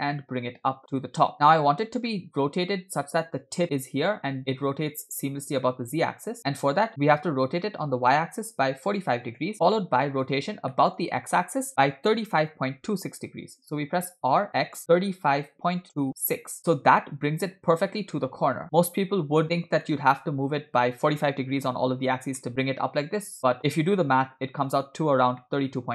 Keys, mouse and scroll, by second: 2.1-2.8 middle drag, 4.4 middle click, 6.3 scroll up 1, 6.6-6.9 middle drag, 7.6 r, 9.6-10.3 middle drag, 11.0 middle click, 14.4 r, 17.1-18.1 middle drag, 18.6 g, 19.6 scroll down 2, 19.8-21.8 middle drag, 22.5-25.0 middle drag, 25.6-25.9 middle drag.